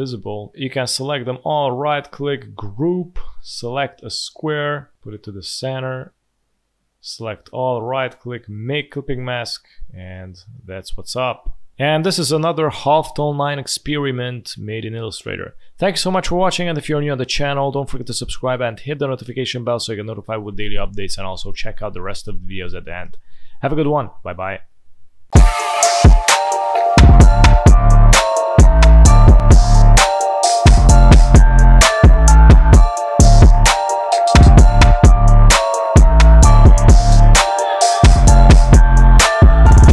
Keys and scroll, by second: 9.5 space, 11.3 z.